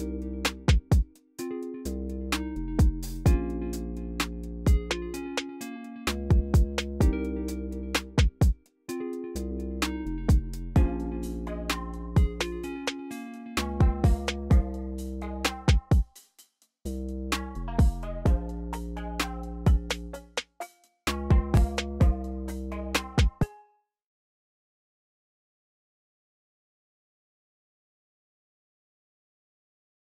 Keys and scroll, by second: 1.9 u, 2.4 ctrl+super+r, 2.7 c, 3.2 y, 4.9 t, 5.7 m, 7.5 typing, 10.8-11.6 typing, 13.6 typing, 15.7 typing, 18.9 u, 19.4 ctrl+super+r, 19.7 c, 23.1 space, 28.9 v.